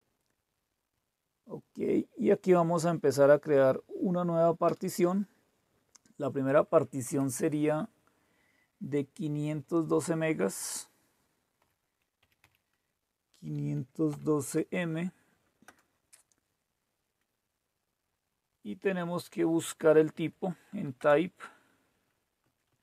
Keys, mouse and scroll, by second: 0.0 Return, 4.7 Return, 6.5 Left, 6.7 Left, 7.0 Left, 9.4 Delete, 9.6 Delete, 9.7 Delete, 10.1 Delete, 10.3 Delete, 11.6-12.4 typing, 14.1 typing, 15.6 Return, 20.1 Right, 20.9 Return, 22.4 Up, 22.6 Up.